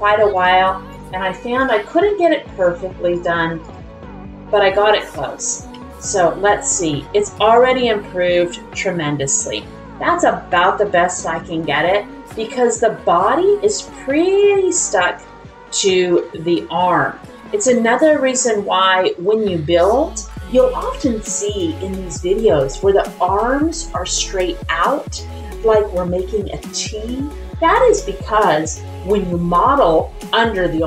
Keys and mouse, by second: 0.3 click, 0.9 click, 2.0 middle click, 3.1 click, 3.6 click, 4.0 middle click, 5.7 r, 7.4 click, 10.5-11.7 drag, 11.7-12.8 middle drag, 14.0 middle click, 14.7 shift+middle click, 15.2 middle click, 16.1-17.3 middle drag, 17.8 middle click, 18.8 middle click.